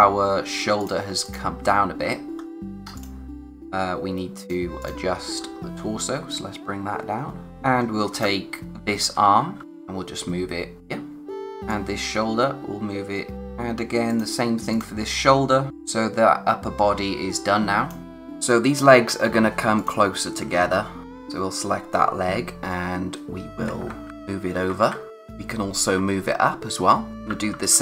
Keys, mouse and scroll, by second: 2.0-3.0 scroll up 1, 3.0 click, 5.5-6.3 scroll up 1, 6.3 click, 7.5-9.5 typing, 7.9 scroll up 1, 9.6 click, 13.3 z, 14.1 click, 16.0 space, 18.0-19.8 scroll up 1, 19.8 click, 20.4-21.0 typing, 23.5 Left, 25.1-26.0 scroll up 1, 26.0 Up, 27.1 click, 27.3-27.8 typing.